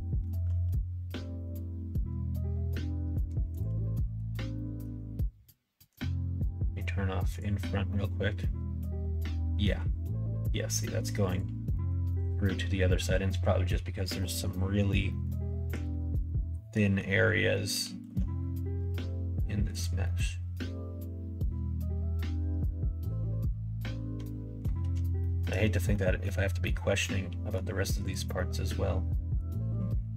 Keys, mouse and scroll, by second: 0.6 g, 3.8 click, 4.6 middle click, 5.9 click, 7.2 click, 7.9-9.6 middle drag, 11.3 click, 11.7 middle click, 12.1 middle click, 14.2 middle click, 15.1 middle click, 16.7 middle click, 17.5 middle click, 18.0 alt+s, 20.0-24.6 middle drag, 25.2 shift+middle click, 25.9 middle click, 26.4 middle click, 27.0 middle click, 28.0 click, 28.3 middle click, 29.1 middle click.